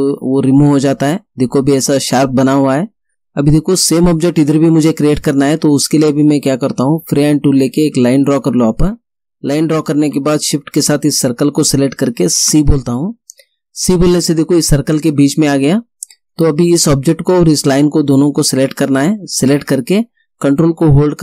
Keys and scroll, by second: 12.5 c.